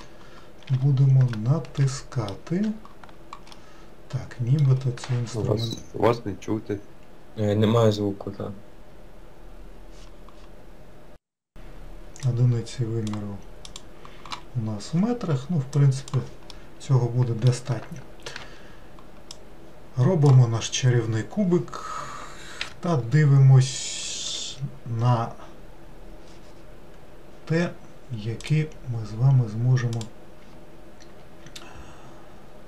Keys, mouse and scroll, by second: 0.7 n, 1.4-2.6 middle drag, 2.6-3.1 scroll down 1, 3.1-3.5 scroll down 1, 3.5-12.2 middle drag, 12.2-16.4 drag, 16.4-18.2 middle drag, 20.2 shift+a, 21.1-22.6 scroll down 1, 22.6 n, 28.4-30.0 drag.